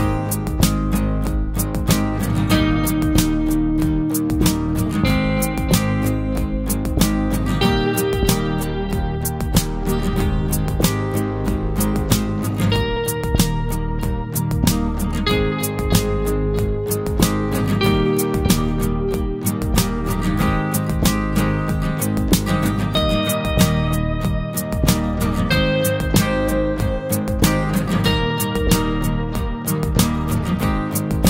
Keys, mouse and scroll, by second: 0.7 Tab, 2.2 click, 4.9 Delete, 5.9 KP_1, 6.6-7.0 scroll up 2, 7.0 shift+middle click, 7.9-8.3 scroll up 1, 8.4 Tab, 8.8 click, 9.7 Delete, 11.5 shift+middle click, 11.9-12.4 scroll up 3, 12.4 click, 12.5 Tab, 13.5 click, 15.9 Delete, 16.4 scroll down 1, 16.6 middle click, 17.2-17.5 scroll down 1, 17.5-18.6 shift+middle drag, 18.6 click, 20.3 scroll down 1, 20.6 middle click, 21.4-22.2 scroll up 1, 22.2 shift+click, 22.8 ctrl+click, 23.8 ctrl+click, 25.7 Delete, 26.4-27.8 shift+middle drag, 27.8 click, 30.6 Delete.